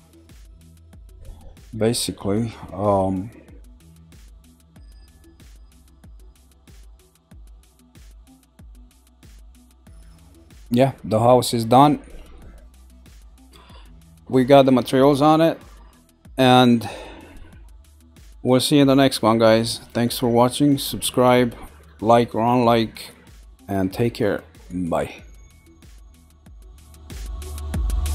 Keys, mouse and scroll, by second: 5.0-7.5 middle drag, 7.7 middle click.